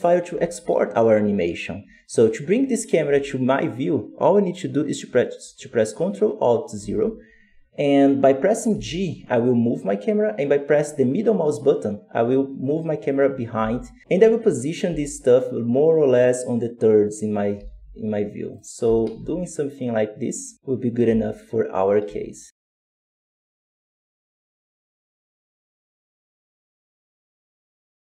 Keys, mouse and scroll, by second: 6.6 ctrl+alt+KP_0, 8.6 g, 13.4 g, 14.0 ctrl+middle click, 14.7 g, 17.5 g, 18.7 r, 20.9 t, 22.5 z, 22.9 right click, 23.1 alt+a, 23.1 scroll down 3, 23.2 ctrl+v, 23.3 ctrl+z, 23.5 ctrl+b, 23.6-25.4 scroll up 3, 25.4 click, 25.7 click, 26.2 click, 27.1 click, 27.6 click.